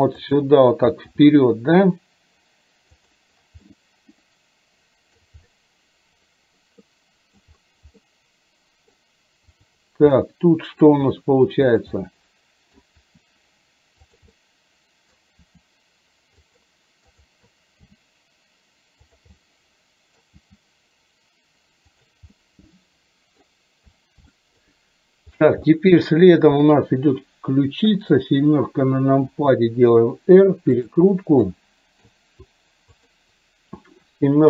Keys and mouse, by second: 1.1 r, 3.7-5.3 middle drag, 6.9 middle click, 8.0 middle click, 9.7 click, 10.3 middle click, 11.0 r, 12.0 middle click, 13.0 r, 14.4 middle click, 17.2 click, 17.9 g, 19.4 middle click, 20.5 g, 22.4-23.5 middle drag, 24.4 shift+middle click, 25.8 middle click, 27.9 KP_7, 29.4 r, 31.5 middle click, 33.0 click, 34.0 KP_7.